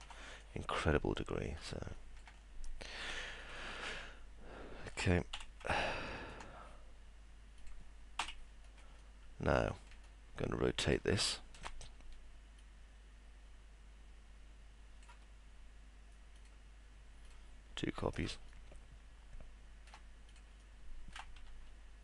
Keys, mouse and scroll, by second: 0.2 middle click, 1.9 alt+middle click, 4.0-4.9 alt+middle drag, 5.8 alt+middle click, 9.3 alt+middle click, 10.0-11.5 alt+middle drag, 12.6-15.0 shift+drag, 18.5-19.8 alt+middle drag, 20.6 alt+middle click.